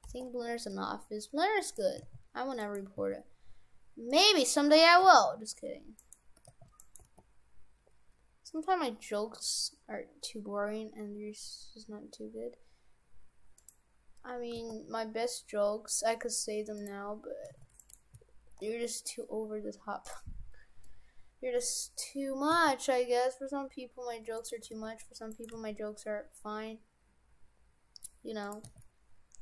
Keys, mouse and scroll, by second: 0.1 g, 2.0 s, 3.0 s, 5.0 g, 6.4 g, 7.1 g, 14.5 g, 17.5 s, 18.2 s, 20.9 middle click, 22.0-22.5 scroll down 1, 22.5-23.1 scroll down 1, 22.5 s, 24.7 g, 25.5 g, 28.5 g, 28.7 s.